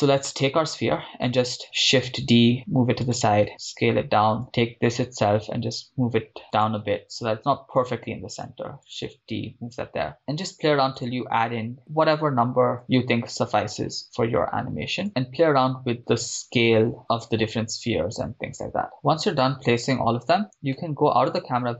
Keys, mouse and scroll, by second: 0.5-1.2 right drag, 1.9 shift+d, 3.2 click, 3.5 s, 4.4 click, 4.4 right click, 5.2 g, 6.6 click, 7.3 shift+d, 8.9 click, 10.1 s, 10.2 click, 10.5 g, 11.0 click, 11.6 shift+d, 11.8 click, 11.8 s, 12.8 click, 13.2 shift+d, 15.0 click, 15.1 s, 16.6 click, 17.0 right click, 17.0 g, 17.3 d, 18.2 s, 18.9 click, 18.9 shift+d, 20.7 KP_0.